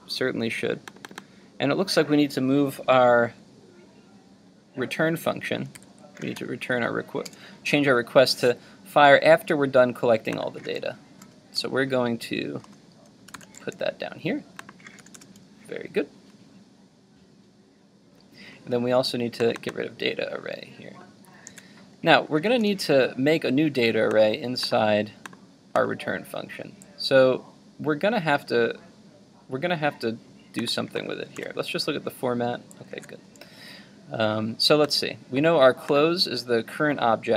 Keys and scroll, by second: 5.8 super+x, 13.4 super+v, 21.5 super+x, 31.4 super+v, 32.9 super+z.